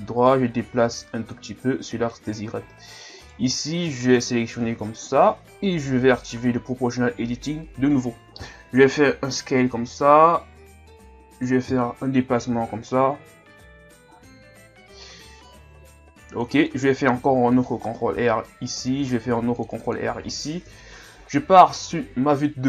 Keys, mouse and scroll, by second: 0.2-2.5 drag, 2.5-2.9 shift+scroll up 3, 3.2 alt+right click, 4.1 KP_1, 5.0 shift+scroll up 3, 6.0 o, 8.9 s, 13.6-17.1 drag, 17.1 ctrl+r, 19.2 ctrl+r, 20.7 KP_3.